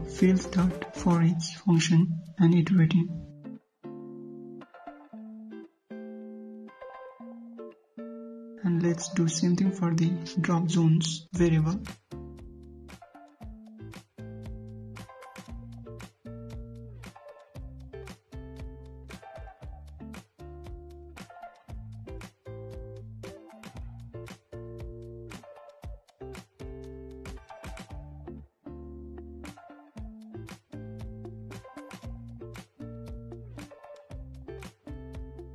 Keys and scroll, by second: 12.5 ctrl+c, 14.3 ctrl+v.